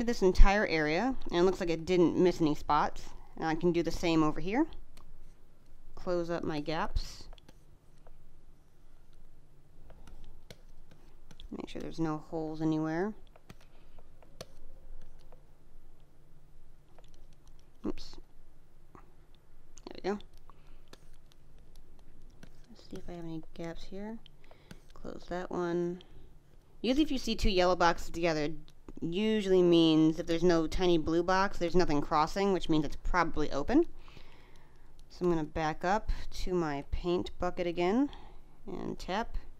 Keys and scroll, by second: 5.9 space, 7.3 space, 9.7 space, 13.2 space, 13.3 g, 13.6 space, 14.3 space, 16.8 space, 19.9 space, 24.4 space, 26.8 space, 31.3 space.